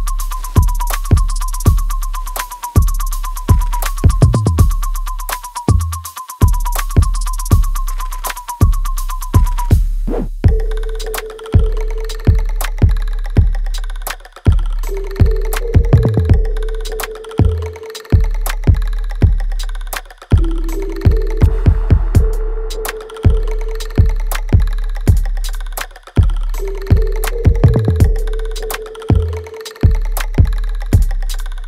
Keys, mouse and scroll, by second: 0.7 click, 5.1 3, 5.4 0, 7.2 BackSpace, 9.3-11.3 typing, 12.5 BackSpace, 13.0 5, 15.2 BackSpace, 15.4 4, 16.8 BackSpace, 18.3 BackSpace, 20.8 BackSpace, 22.4 BackSpace, 23.7 Return, 26.7 scroll up 1, 26.9 r, 28.6 click, 29.9 middle click, 31.2 scroll down 1, 31.5 l.